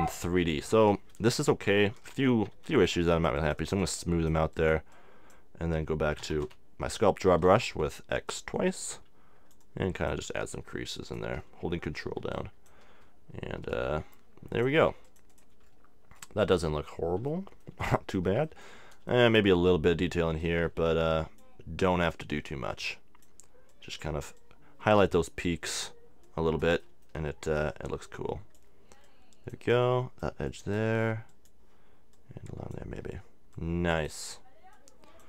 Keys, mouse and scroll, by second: 1.9 s, 2.6 f, 3.1-6.8 drag, 6.2 x, 6.4 x, 7.3 f, 8.4-17.3 drag, 16.6-18.4 middle drag, 20.4-22.2 drag, 21.9 middle click, 21.9 right click, 22.3 middle click, 22.7-35.2 drag, 22.7-24.2 right drag, 26.8-34.0 middle drag.